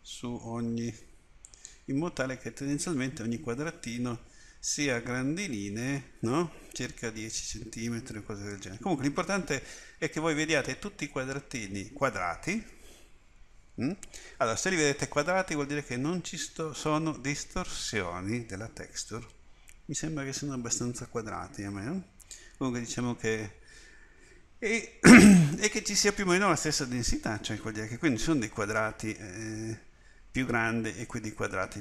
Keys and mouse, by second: 20.6-22.4 middle drag.